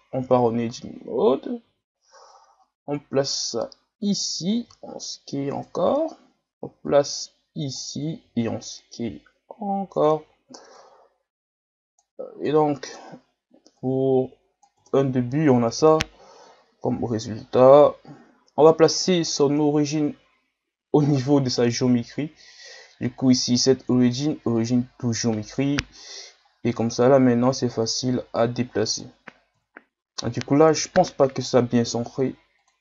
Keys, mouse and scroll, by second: 0.2 Tab, 1.0 a, 1.4 a, 1.6 a, 2.3-4.5 drag, 4.5 s, 5.8-6.9 scroll up 5, 6.9-8.1 drag, 8.1 s, 10.8-12.3 drag, 12.3 s, 13.8-14.8 drag, 14.8 Tab, 15.0 scroll down 3, 15.8 KP_3, 16.6-17.1 scroll up 1, 17.1 ctrl+scroll down 1, 18.1-19.2 ctrl+scroll down 3, 19.2-29.6 drag, 29.6 KP_1, 29.8 middle click, 30.8 KP_1, 31.4-32.6 scroll up 2, 32.6-32.8 drag.